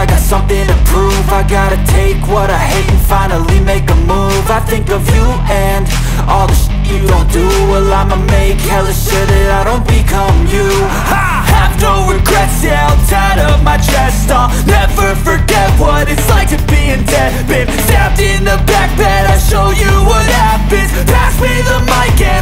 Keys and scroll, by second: 14.5 ctrl+a, 16.1 ctrl+z, 19.8 ctrl+a.